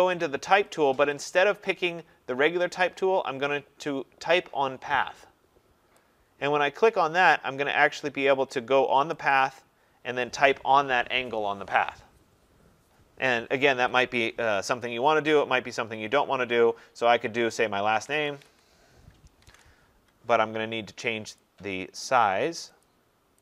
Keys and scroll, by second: 19.3 ctrl+a.